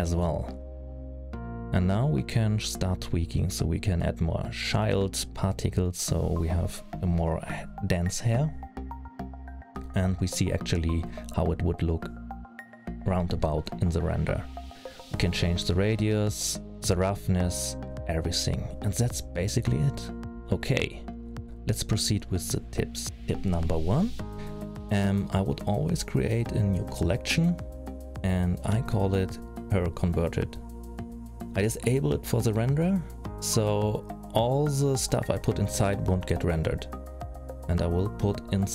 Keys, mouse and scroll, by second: 0.4-2.1 scroll down 7, 2.1 click, 6.2 click, 9.2 middle click, 11.6-12.2 scroll down 5, 12.7-13.2 scroll down 5, 13.1-14.3 scroll up 4, 14.3-15.2 scroll up 1, 15.2 middle click, 16.2 scroll up 1, 16.8 click, 22.6 middle click, 23.1 click, 24.0 middle click, 27.0 right click, 29.5 click, 29.7 click, 35.3 click, 36.9 click, 38.6 click.